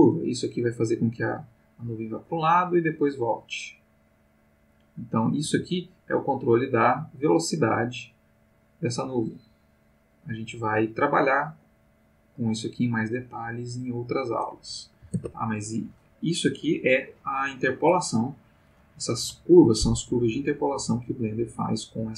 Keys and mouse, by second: 5.4 g, 7.3 click, 8.0-14.7 drag, 15.2 ctrl+Tab, 17.9-18.7 drag, 19.2 Delete, 19.6 click, 20.4-22.1 drag.